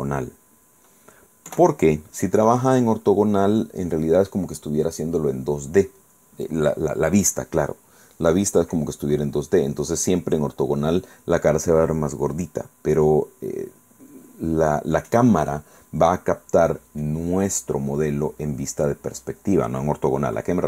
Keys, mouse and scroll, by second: 1.6 KP_5, 2.7-4.6 middle drag, 18.5 scroll down 1, 18.9-20.0 middle drag.